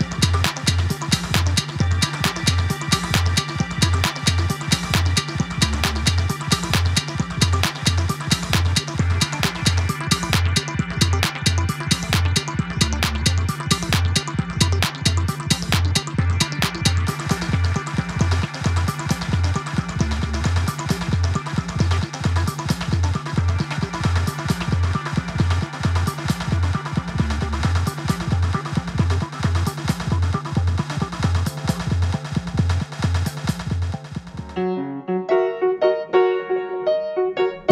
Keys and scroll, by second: 16.8 d, 23.0 super+c, 23.1 super+v, 23.7 super+c, 23.8 super+v, 24.3 super+v.